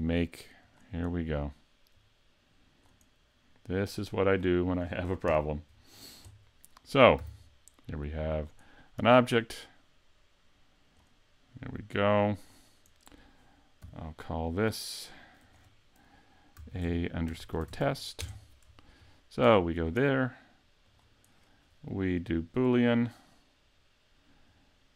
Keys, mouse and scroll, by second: 0.6 click, 2.0 click, 3.9 click, 5.3 KP_Decimal, 5.9-6.7 scroll down 7, 6.7 middle click, 7.3 s, 8.4 click, 9.1 click, 11.8 click, 13.8 n, 15.5 click, 19.2 shift+middle click, 19.6 right click, 20.9 click, 24.5 click.